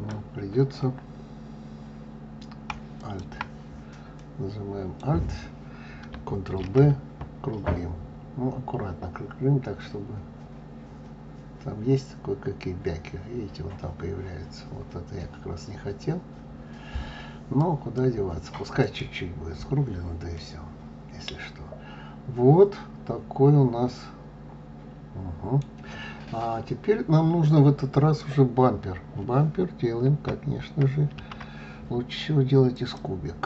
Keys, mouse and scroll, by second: 2.9 alt+click, 4.1-6.5 middle drag, 6.5 ctrl+b, 18.7 click, 19.7-20.2 scroll down 1, 20.2-23.3 middle drag, 26.2-26.9 scroll down 2, 26.9-27.6 scroll up 2, 31.1 shift+a.